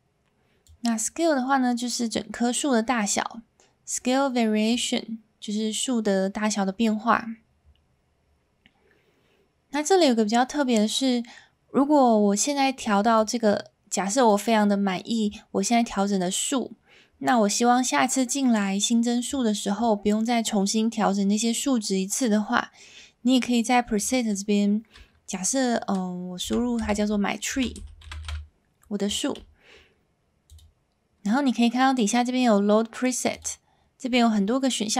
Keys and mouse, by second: 0.8-3.1 drag, 4.8-6.9 drag, 13.2-14.4 drag, 23.9-30.5 drag, 28.2 e, 33.5-34.9 drag.